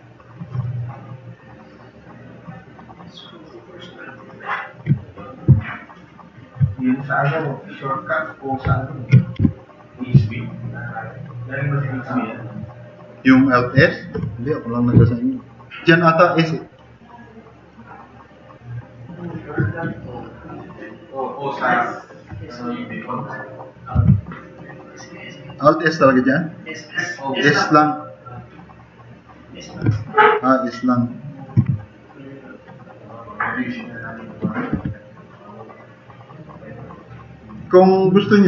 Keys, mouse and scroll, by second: 0.9 click, 1.6 click, 3.2 click, 4.3-4.7 drag, 5.2 click, 5.6 drag, 6.0 click, 9.4 Delete, 11.5 drag, 20.7 middle drag, 21.5 middle click, 24.0 r, 25.3-29.5 drag, 31.7-32.2 drag, 32.9 click, 34.8 e, 35.7 click, 35.8 drag.